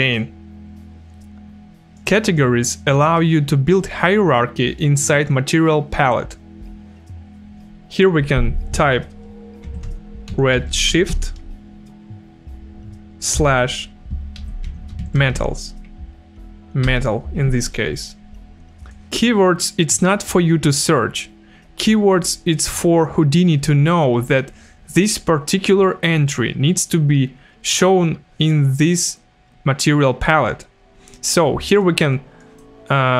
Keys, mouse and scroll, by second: 1.9 click, 9.4-11.6 typing, 13.3 KP_Divide, 14.1-15.8 typing, 16.9 BackSpace, 18.9 click, 31.7 click.